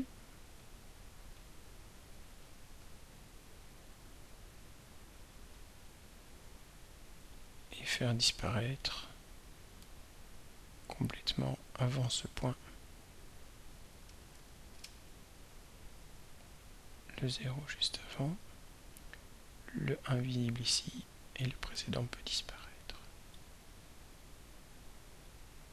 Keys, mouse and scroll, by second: 0.6-4.4 ctrl+drag, 8.7-10.0 drag, 12.9 click, 13.4 click, 14.4 0, 16.6 click, 18.5-20.7 drag, 21.5 right click, 22.6 click, 23.4 right click, 25.2 click.